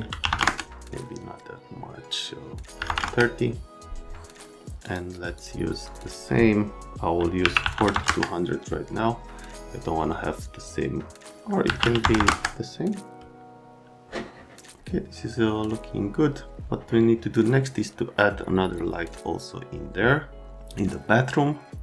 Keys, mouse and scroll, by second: 0.2 KP_5, 0.3 KP_0, 0.3 KP_Enter, 2.7 KP_3, 2.8 KP_0, 3.0 KP_Enter, 7.4 KP_4, 7.6 KP_2, 7.8 KP_0, 7.9 KP_0, 8.1 KP_Enter, 11.6 KP_3, 11.8 KP_5, 12.0 KP_0, 12.1 KP_0, 12.2 KP_Enter.